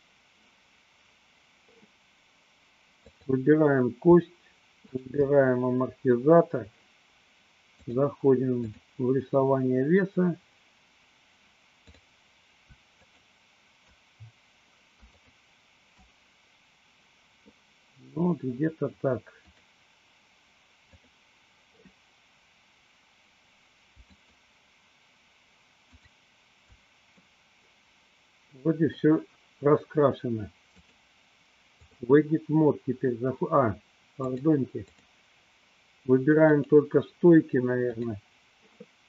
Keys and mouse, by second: 3.0 click, 4.9 shift+click, 7.8-9.0 drag, 11.9 click, 13.2 shift+click, 15.2 shift+click, 19.5 click, 21.0 click, 24.1 shift+click, 27.5-29.2 middle drag, 30.9-32.1 drag, 34.2-35.2 drag, 37.9 click.